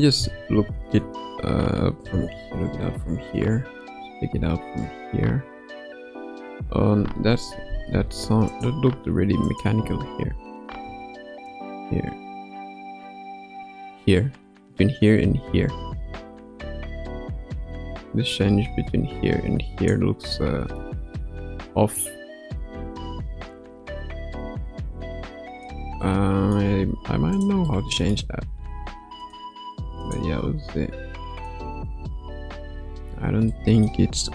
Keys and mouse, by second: 0.9 ctrl+s, 2.0 space, 7.5 space, 8.5 click, 9.4 click, 9.8 space, 10.7 space, 11.5-19.9 drag, 20.2-20.8 middle drag, 21.9-25.7 drag, 26.0-26.5 middle drag, 27.7-28.1 middle drag, 28.5 r, 30.0 click, 30.5 r, 31.8 a, 32.6 i, 33.5-33.9 middle drag.